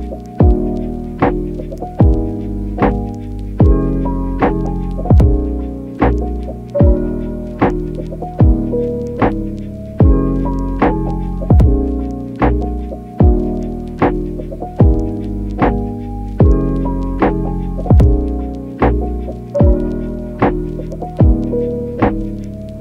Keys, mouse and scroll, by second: 1.4 click, 1.6 click, 2.2 click, 2.6 click, 4.3 click, 4.4 click, 5.2 click, 6.6 middle click, 7.0 click, 7.3 click, 7.6 click, 7.7 click, 8.4 click, 9.3 click, 9.5 click, 10.1 click, 10.7 click, 11.6 click, 12.4 click, 13.0 click, 13.7 middle click, 14.0 click, 14.5 alt+q, 16.1 click, 16.7 click, 16.9 click, 17.3 click, 17.3 middle click, 17.9 middle click, 18.7 ctrl+z, 18.9 ctrl+z, 19.3 click, 19.6 click, 20.3 click, 20.8 alt+q, 22.2 alt+shift+click.